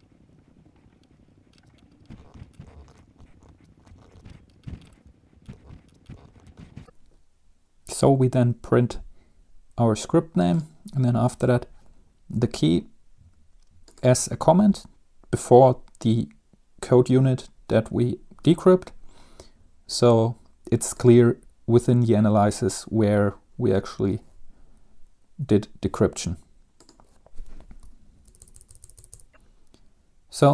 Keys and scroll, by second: 2.2 Right, 2.2-7.0 typing, 2.3 Right, 2.7 Left, 3.6 Return, 3.9 Up, 3.9 Home, 3.9 Right, 6.2 Tab, 28.3 shift+Tab, 28.5 Left, 28.5-28.9 BackSpace, 28.7 BackSpace.